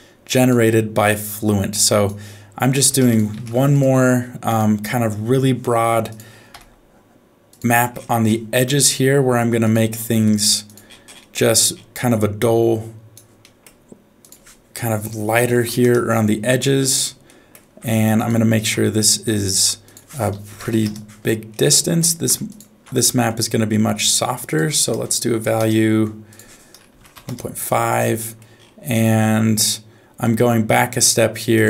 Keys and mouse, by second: 0.3 click, 1.2 click, 2.9 shift+a, 5.7 middle click, 6.1 click, 6.5 f, 8.7 g, 10.1 g, 11.4 middle click, 12.4 click, 13.4 middle click, 14.3-15.8 drag, 17.3 middle click, 18.2 ctrl+shift+click, 19.8-20.8 drag, 21.7 middle click, 22.5 ctrl+shift+click, 23.0 middle click, 24.4-25.6 drag, 26.3-27.3 drag, 28.2 middle click, 30.3 middle click, 31.5 click.